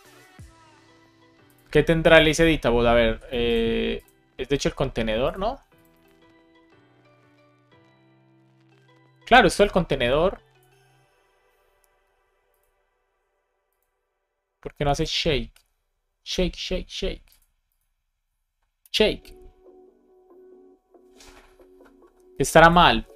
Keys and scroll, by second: 18.8 Return.